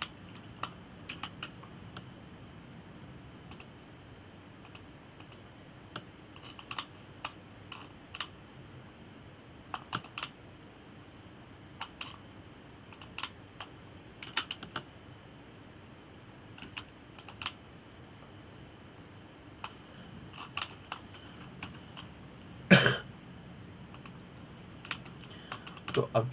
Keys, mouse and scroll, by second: 1.7-2.8 middle drag, 2.8 KP_7, 5.2 click, 6.3 click, 6.9 click, 8.1-8.5 scroll up 3, 8.5-9.5 shift+middle drag, 9.5-9.9 scroll down 3, 9.9-11.7 middle drag, 11.7 click, 11.9-13.7 middle drag, 13.7-14.6 scroll up 3, 14.6 click, 14.9-16.0 middle drag, 16.0 g, 19.2-22.1 middle drag, 22.1 scroll down 2, 22.3-23.4 middle drag, 23.4 Tab, 23.7-25.7 scroll down 2, 25.7 click.